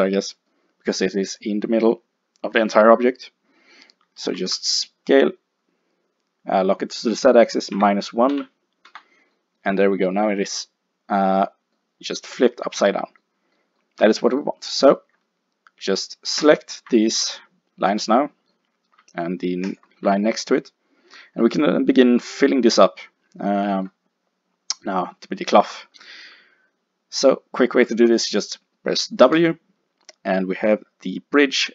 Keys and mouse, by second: 0.4-3.5 middle drag, 4.3 s, 9.4-11.1 middle drag, 11.4-14.4 middle drag, 16.4 click, 19.7-21.3 drag, 21.3 middle click, 29.3 w.